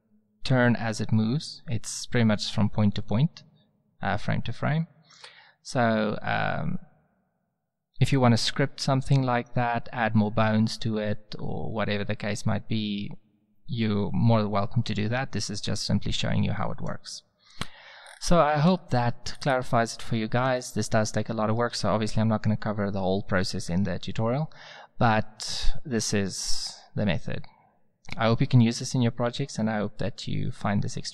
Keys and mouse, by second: 3.0-3.4 drag, 4.3-5.0 drag, 18.0-18.5 middle drag, 27.0-28.4 drag.